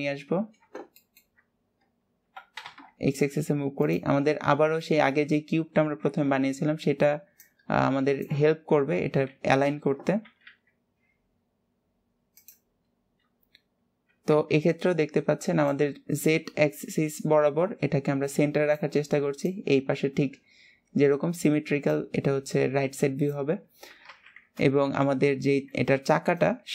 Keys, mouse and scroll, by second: 0.2-1.2 scroll up 1, 1.2 shift+middle click, 1.6 scroll up 1, 4.5-5.0 scroll up 1, 5.0-9.4 shift+middle drag, 13.3-13.8 scroll up 1, 13.8-15.3 scroll down 2, 25.2-26.7 shift+middle drag.